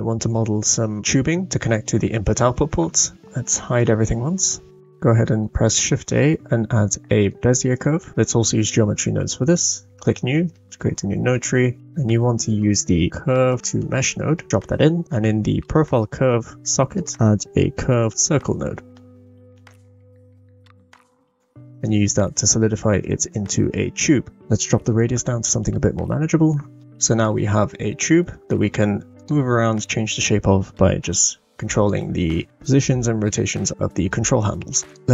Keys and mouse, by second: 3.7 click, 10.6 middle click, 11.9 shift+a, 14.8 middle click, 16.3-21.8 drag, 19.6 BackSpace, 24.4 click, 27.2-28.1 middle drag, 28.5 Tab, 29.2 click, 29.9 middle click, 31.3 e, 32.0 ctrl+z, 32.8 g.